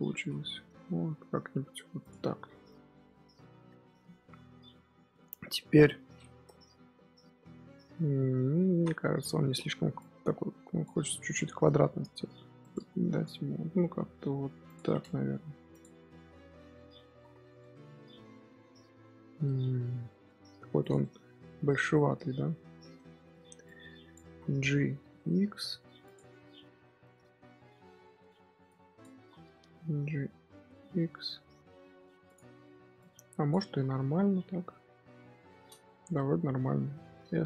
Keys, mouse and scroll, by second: 0.0 s, 2.1 middle click, 2.7 scroll up 1, 2.9 middle click, 3.2-3.6 scroll up 3, 3.6 Tab, 5.0 KP_3, 5.4 KP_1, 7.0 Tab, 7.9-8.7 scroll down 1, 8.7 z, 9.4 z, 9.9 click, 11.7 g, 13.0 g, 15.4 Tab, 15.6 click, 16.0 z, 16.2-17.1 middle drag, 17.1 scroll down 1, 17.2 scroll up 1, 17.3 scroll down 1, 17.5-20.4 middle drag, 20.4-20.7 scroll up 1, 20.7 click, 20.9 middle drag, 21.2 scroll up 1, 22.9 Tab, 23.2 z, 23.6 click, 24.2 z, 24.5 middle click, 24.9 g, 26.1-26.8 scroll up 1, 26.8 scroll up 1, 26.9-28.1 middle drag, 28.1 z, 28.6 click, 29.1 z, 29.5 g, 32.9 click, 33.6 z, 34.6-36.8 middle drag, 36.8 a, 37.1 s.